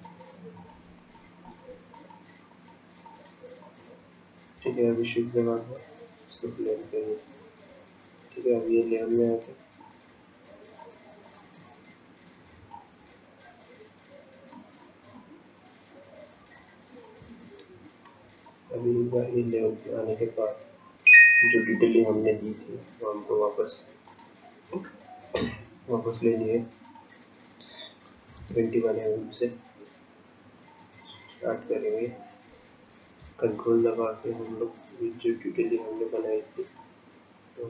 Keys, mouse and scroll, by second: 4.7 shift+click, 9.8 shift+click, 16.6 click, 18.6 shift+click, 24.1 click, 33.5 ctrl+click, 36.2 ctrl+click.